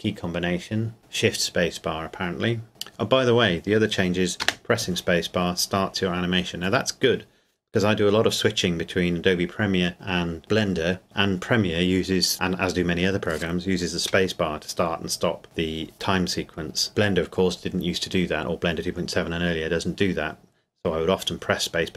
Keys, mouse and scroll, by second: 4.4 space.